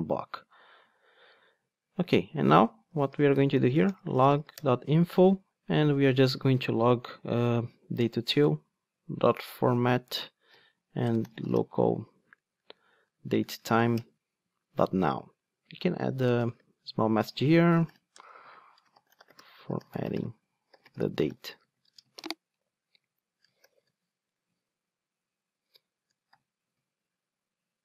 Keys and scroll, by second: 2.9 Tab, 4.5 Tab, 6.6 Return, 14.0 Return.